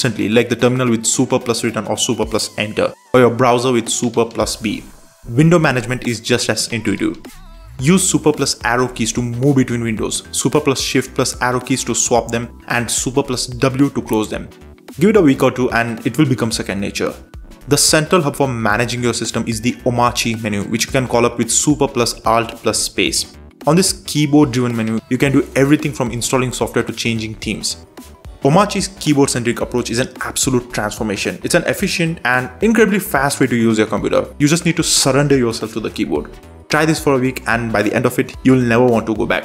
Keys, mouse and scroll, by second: 0.1 shift+super+Left, 1.5 super+Right, 2.1 shift+super+Up, 3.5 super+j, 4.1 super+j, 4.6 super+j, 6.0 super+Left, 6.3 shift+super+4, 8.6 super+space, 9.2-10.3 typing, 10.3 super+Left, 11.1 super+w, 12.6 super+n, 19.4 super+w, 21.0 ctrl+n, 21.9-31.2 typing, 28.4 Right, 32.1 Tab, 32.6 super+b, 35.1-36.4 typing, 36.6 Down, 36.7 Down, 37.2 Return, 39.3 Tab.